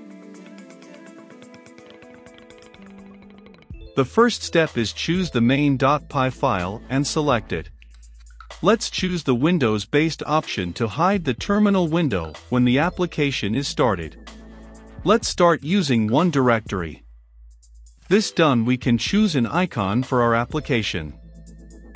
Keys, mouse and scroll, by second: 15.8-16.5 middle drag, 15.8-16.5 scroll, 16.5-21.9 drag.